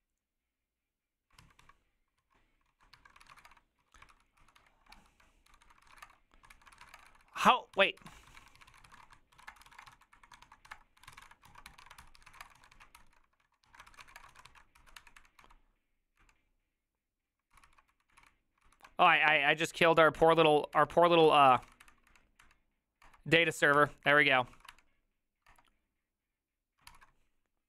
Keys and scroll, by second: 1.4 alt+{, 1.6 alt+[, 2.2 alt+{, 2.7 ctrl+a, 2.9 1, 3.2 ctrl+c, 3.3 ctrl+:, 3.4 w, 3.4 Return, 3.8 ctrl+u, 4.1 ctrl+c, 4.4 ctrl+c, 4.5 ctrl+d, 4.9 ctrl+c, 5.2-15.0 typing, 13.0 ctrl+c, 15.0 Up, 15.2 Up, 15.4 Down, 16.2 Up, 17.5 ctrl+c, 17.6-18.7 typing, 19.1 Up, 20.3 Up, 20.8 Up, 21.0-22.2 typing, 22.4 Up, 23.1 Return, 23.5 ctrl+a, 23.8 3, 24.3 ctrl+c, 24.4 ctrl+c, 24.6 ctrl+c, 24.7 Up, 25.5 Return, 27.0 ctrl+c.